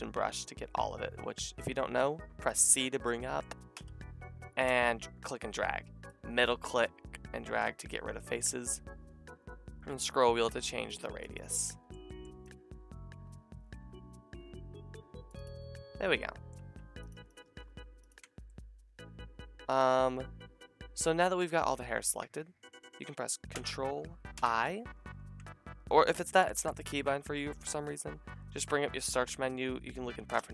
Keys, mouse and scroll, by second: 3.7 c, 4.4-16.6 drag, 12.3 c, 16.6 c, 17.3 shift+click, 18.0 ctrl+shift+click, 19.4 click, 24.4 ctrl+i, 26.4 ctrl+i.